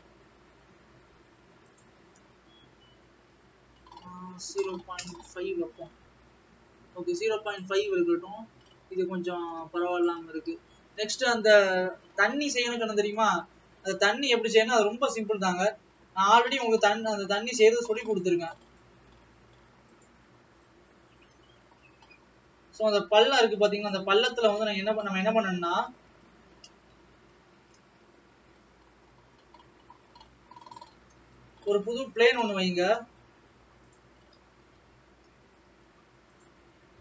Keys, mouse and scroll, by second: 7.6 click.